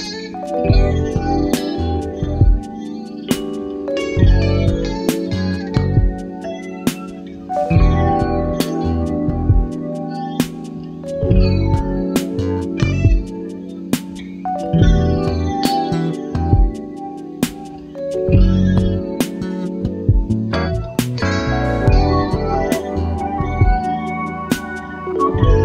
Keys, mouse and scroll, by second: 1.9 ctrl+d, 4.4 shift+click, 4.8 shift+click, 6.6 Delete, 8.3 click, 9.7 click, 10.4 click, 12.1 click, 14.1 click, 15.9 click, 18.4 click, 20.9 click, 22.2 click, 23.2 KP_5, 24.6-24.9 scroll up 2.